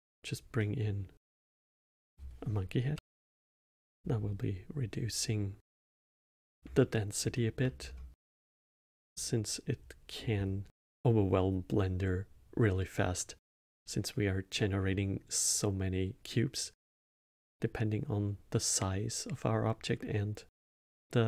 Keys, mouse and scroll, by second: 0.5-1.8 middle drag, 1.8-4.7 drag, 6.7-7.7 alt+middle drag, 7.7-8.1 scroll down 3, 8.1-11.6 middle drag, 13.6-14.5 scroll up 1, 14.5-17.5 middle drag.